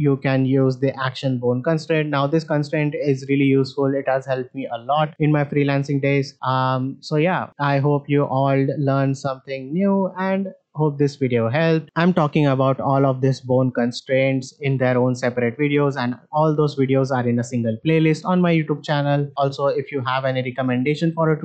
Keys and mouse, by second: 7.6 shift+middle drag, 8.7 middle click, 10.9 shift+middle drag, 11.3-11.8 middle drag, 12.5-17.0 drag, 19.6 click.